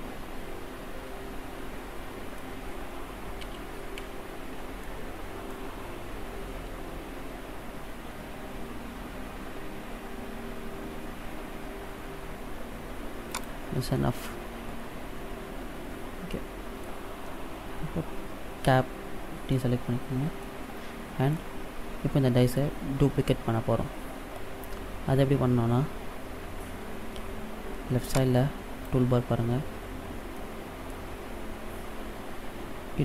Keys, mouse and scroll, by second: 3.4 ctrl+z, 4.0 ctrl+z, 4.8 middle click, 6.6 s, 13.9 middle click, 17.2-17.5 scroll down 3, 18.7 Tab, 19.5 middle click, 21.3 middle click, 25.9-27.7 scroll up 1, 28.1 click, 30.3 middle click, 31.2-31.6 scroll down 2.